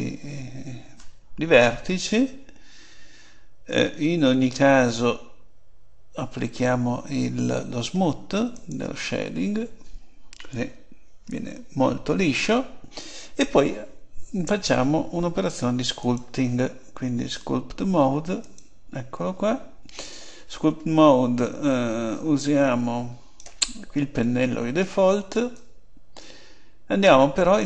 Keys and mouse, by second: 4.5-6.3 drag, 8.6-10.4 drag, 10.6 Tab, 16.0 click, 22.1-27.3 drag.